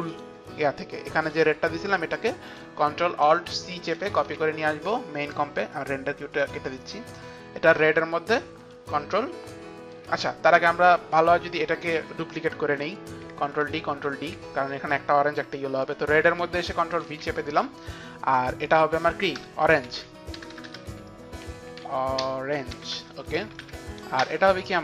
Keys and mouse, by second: 0.2 click, 1.3 Return, 1.3 click, 1.3 d, 2.6 click, 4.1 ctrl+alt+c, 5.3 click, 6.7 ctrl+alt+c, 6.7 click, 8.3 click, 9.5 click, 13.8 ctrl+d, 14.4 ctrl+d, 15.9 click, 17.1 ctrl+v, 18.7 click, 19.2 ctrl+v, 19.2 click, 19.4 Return, 20.0 Right, 21.3 Right, 21.3 Return, 21.3 ctrl+v, 21.3 click, 21.3-23.5 typing, 21.6 click, 21.7 click, 23.7 ctrl+Up, 24.2 Return.